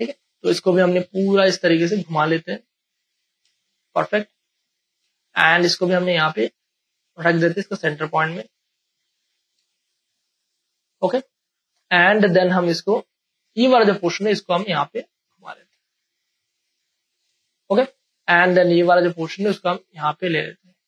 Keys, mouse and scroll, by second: 3.5 space, 3.7 click, 4.0 space, 4.3-9.6 ctrl+drag, 10.0 space, 10.3-17.3 ctrl+drag, 17.3 space, 17.5 click, 17.8 space, 18.9-20.8 drag.